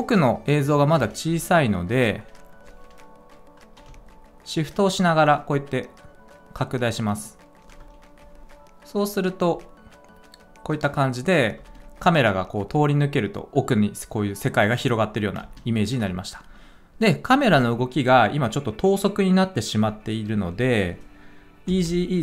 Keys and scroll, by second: 11.5 space, 15.3 space, 21.6 F9.